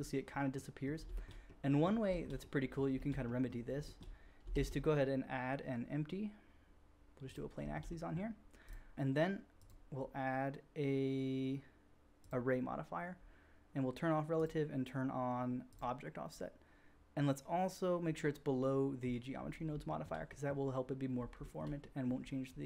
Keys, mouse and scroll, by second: 1.0 shift+middle drag, 1.2-1.6 drag, 2.0 shift+middle drag, 2.2-2.8 drag, 2.8 shift+middle drag, 3.3-3.7 drag, 3.9-4.4 drag, 4.5-5.6 drag, 4.5 shift+a, 7.5 middle click, 7.5-7.9 shift+drag, 7.9 middle drag, 8.1-8.6 drag, 8.6 middle click, 8.9-9.5 drag, 9.5-10.0 middle drag, 14.4-16.4 drag, 16.8-19.1 drag, 19.1 middle click, 19.2 drag, 19.6-20.0 shift+drag, 20.4-21.6 drag.